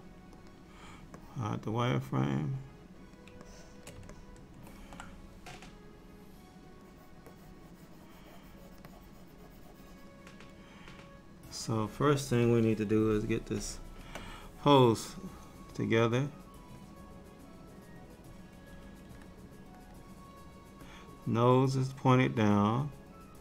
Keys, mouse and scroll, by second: 1.3 middle click, 3.5 shift+middle click, 4.2 ctrl+middle click, 6.9 click, 7.4 click, 7.7 click, 9.0 click, 12.9 KP_3, 15.2 click, 16.9 click, 19.1 f, 20.9 click.